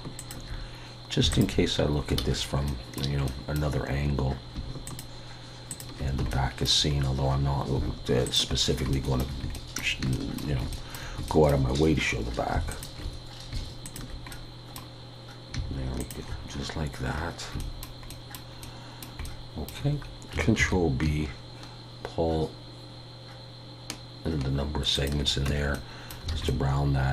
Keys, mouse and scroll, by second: 2.2 ctrl+z, 2.7 middle click, 3.3 middle click, 4.9 alt+shift+click, 6.3 shift+middle click, 6.9 scroll up 1, 7.8-8.3 scroll up 2, 8.3 alt+shift+click, 8.6 scroll down 3, 8.9 shift+middle click, 10.1 shift+middle click, 10.7 shift+middle click, 11.3 shift+middle click, 12.0-12.7 scroll up 2, 12.7 alt+shift+click, 14.3 middle click, 16.0 alt+shift+click, 16.5-17.5 scroll down 7, 17.6 shift+middle click, 20.6 ctrl+b, 25.7 middle click, 26.3 alt+a, 26.5 middle click.